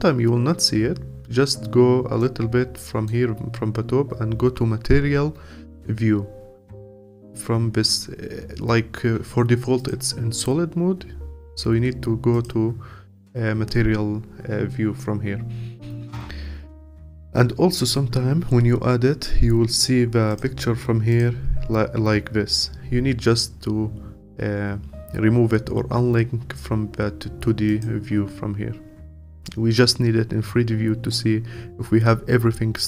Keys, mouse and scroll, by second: 9.8 click, 12.3 click, 20.4-32.8 drag.